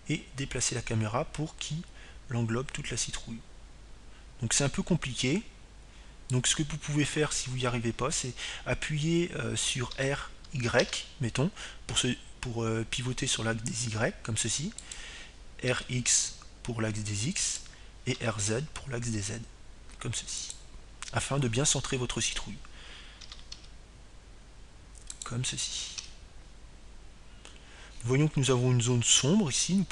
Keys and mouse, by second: 0.0-1.0 drag, 2.4 r, 10.1-11.8 drag, 13.7 r, 18.5-20.4 drag, 19.4 r, 21.2-22.9 drag, 21.8 r, 24.9-26.1 drag, 27.0 r, 28.9-29.9 drag.